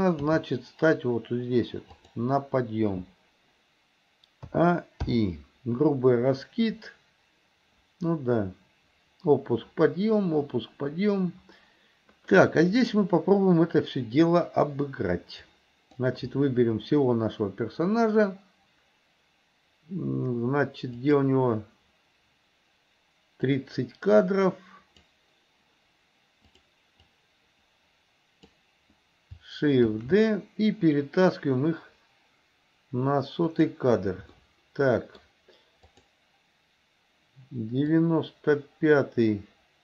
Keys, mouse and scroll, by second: 0.4 g, 4.5 a, 5.1 i, 6.4-13.0 drag, 15.5-16.1 drag, 21.1 click, 23.5-25.1 drag, 26.5 click, 27.0-28.6 drag, 30.0 shift+d, 34.5 middle click, 36.0 click, 38.0-39.8 drag.